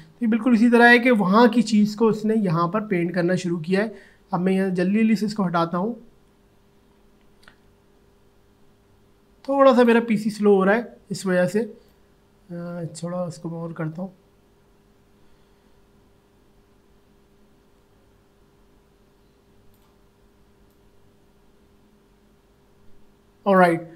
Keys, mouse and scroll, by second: 11.9-20.7 drag, 21.0-23.9 drag.